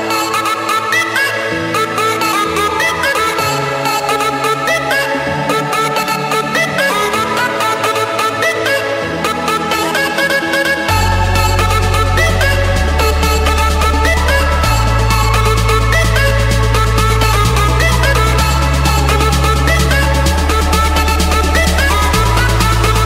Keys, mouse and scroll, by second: 1.9-3.1 drag, 3.6-4.8 drag, 5.5-6.6 drag, 11.1-12.4 drag, 13.9-14.9 drag, 15.5 click, 16.0-17.0 scroll, 17.0 scroll up 9, 18.1 scroll, 19.5 click, 20.3 click, 20.9 click, 21.2 scroll, 21.4-21.8 scroll down 5, 22.1-22.5 scroll up 5.